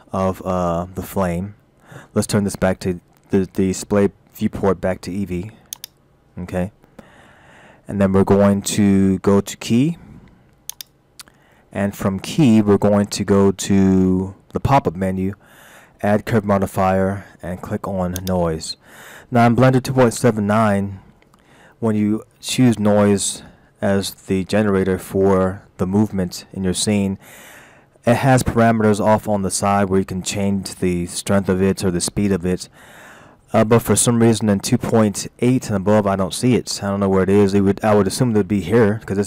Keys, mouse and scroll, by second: 2.7-4.3 scroll down 6, 5.8 click, 7.2-8.4 scroll down 3, 8.4-8.8 scroll down 3, 9.1-9.4 scroll up 2, 10.7 click, 26.6-27.1 scroll up 2, 32.8 scroll down 1, 33.9 middle click.